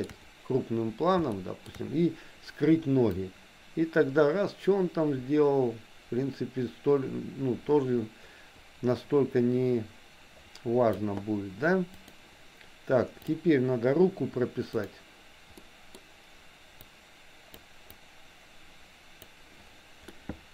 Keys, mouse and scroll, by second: 1.3 shift+middle click, 3.3-11.0 drag, 11.9 click, 14.8 click, 15.7 middle click, 16.9 click, 18.0-19.3 drag, 20.2 middle click.